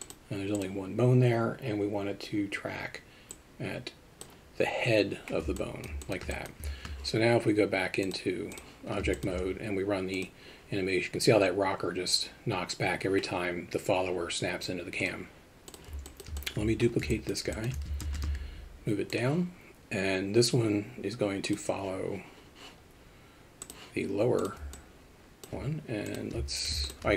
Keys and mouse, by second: 0.0 click, 3.4 click, 5.5 alt+middle click, 6.0 alt+shift+middle click, 6.3 alt+middle click, 8.1 click, 9.1 shift+middle drag, 10.2 click, 15.0 click, 15.6 click, 16.0 alt+middle drag, 16.4 alt+shift+middle drag, 17.1 middle drag, 17.5 alt+shift+middle drag, 18.0 shift+d, 24.7-25.4 middle drag, 26.8 shift+click.